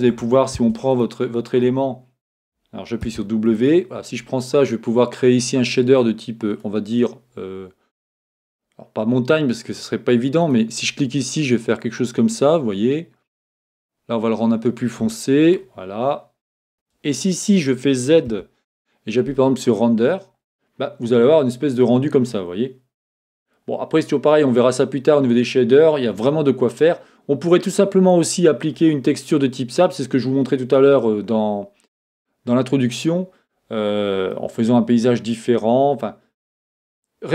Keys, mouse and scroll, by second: 0.6 Tab, 0.9 click, 3.1 w, 3.5 click, 5.5-9.1 drag, 10.4 click, 16.7 Escape, 18.3 z, 21.8-37.3 middle drag.